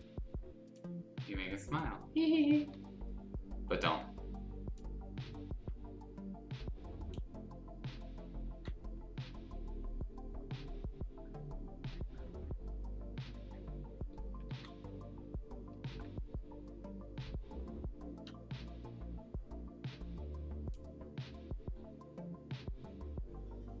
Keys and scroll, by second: 2.7 ctrl+z, 14.5 ctrl+z.